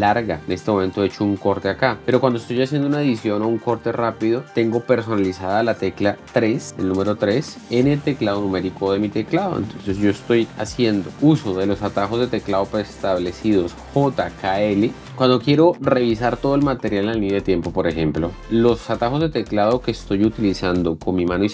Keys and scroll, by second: 0.4 ctrl+b.